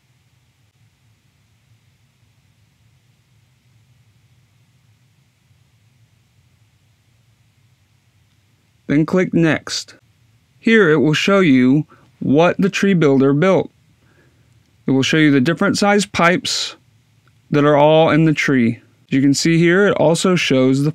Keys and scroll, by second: 0.7 1, 1.0 5, 1.7 0, 5.2 2, 5.6 5, 6.1 0.